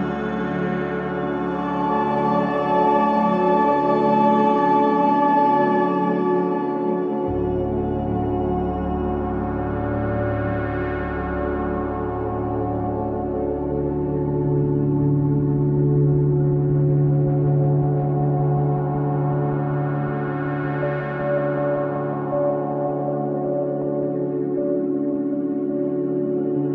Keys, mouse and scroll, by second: 6.4-6.7 scroll up 1, 7.8-9.0 drag, 9.0 scroll up 1, 9.2-15.3 drag, 16.0 click, 18.7-19.1 scroll up 1, 19.2 click, 19.9-20.3 scroll down 1, 20.3-26.4 drag.